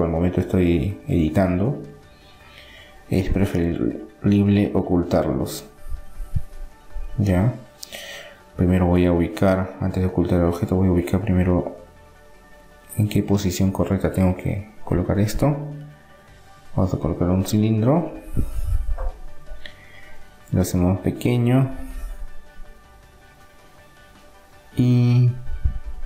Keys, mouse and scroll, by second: 2.8 KP_7, 3.1 middle click, 6.0-7.4 middle drag, 10.1-13.4 middle drag, 10.8 KP_7, 13.4-15.1 drag, 14.8 shift+a, 19.0-22.0 middle drag, 21.8 s.